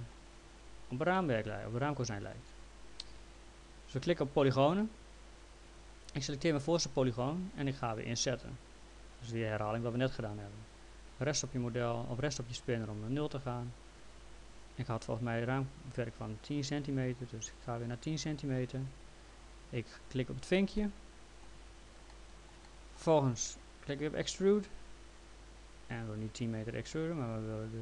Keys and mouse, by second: 1.1 alt+middle click, 4.0 click, 5.7 click, 8.6 click, 11.5 right click, 13.6 click, 13.9 click, 20.1 click, 20.8 middle click, 22.1 middle click, 24.4 click, 26.4 right click.